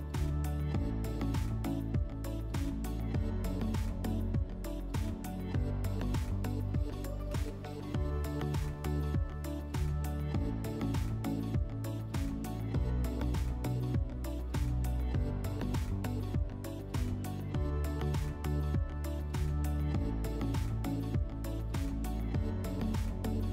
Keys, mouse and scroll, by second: 23.0 click, 23.4 click.